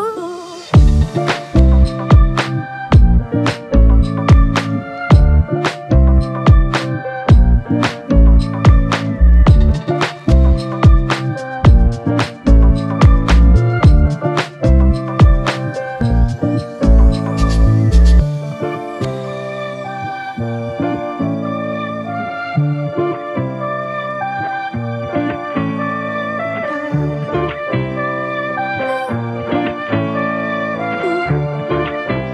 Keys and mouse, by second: 1.4 alt+m, 2.9 typing, 4.7 double click, 16.8 ctrl+i, 18.9 typing, 22.5 double click.